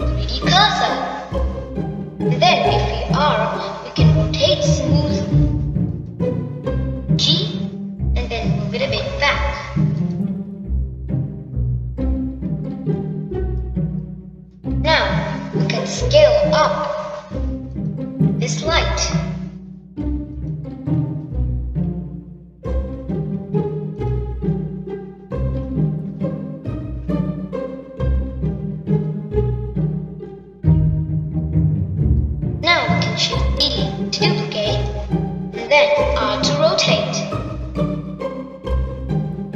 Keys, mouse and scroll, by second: 4.4 r, 8.7 g, 12.3 scroll down 2, 12.4-15.4 middle drag, 15.9-19.0 middle drag, 19.5 click, 22.2 click, 23.7 s, 25.8 click, 27.4 click, 30.9-33.9 drag, 35.3 shift+d, 38.0 r.